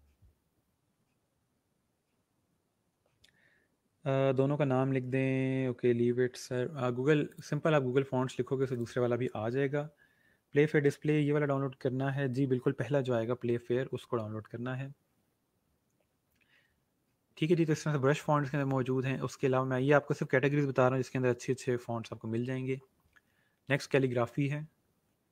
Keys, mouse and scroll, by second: 2.7 scroll down 1, 7.2 click, 15.0 scroll down 1, 17.9 scroll up 1, 23.6 click, 24.5 scroll down 1.